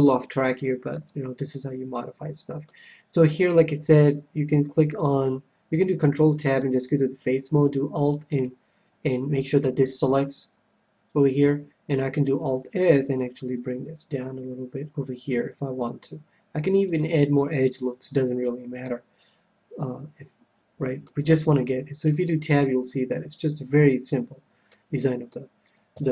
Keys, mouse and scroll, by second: 0.9 a, 1.5-3.1 middle drag, 5.9 ctrl+Tab, 8.3-10.0 right drag, 12.4 alt+s, 16.9-18.5 drag, 17.6 KP_1, 18.3-20.6 middle drag, 21.2 a, 22.1 Tab, 22.5-24.1 middle drag, 25.1-26.1 middle drag, 25.8 KP_7.